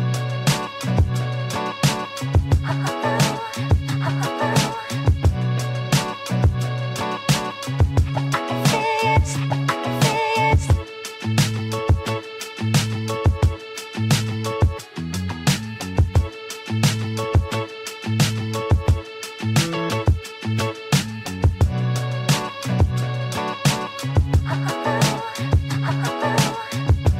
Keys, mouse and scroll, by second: 3.2-5.0 drag, 15.9 alt+scroll down 1, 19.1 alt+scroll down 1, 22.0 Delete, 23.9 ctrl+d.